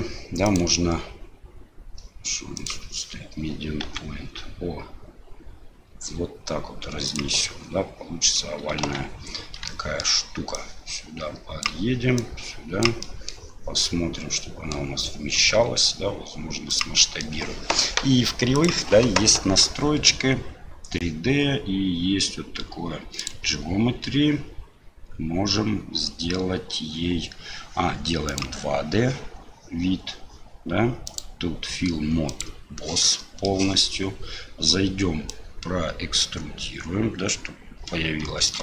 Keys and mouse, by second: 0.6-2.7 right drag, 7.4 middle click, 8.8 Tab, 9.7 shift+click, 10.5-11.7 drag, 12.2 click, 13.0 middle click, 14.0 middle click, 17.1 middle click, 18.6 click, 23.2 click, 31.1-32.6 drag, 33.1 middle click, 35.4-38.6 drag.